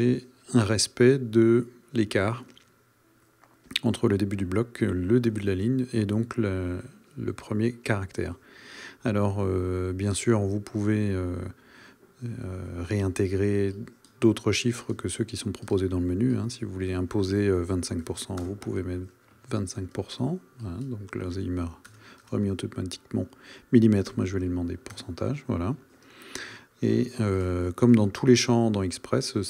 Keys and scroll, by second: 21.8 BackSpace, 24.9 Return.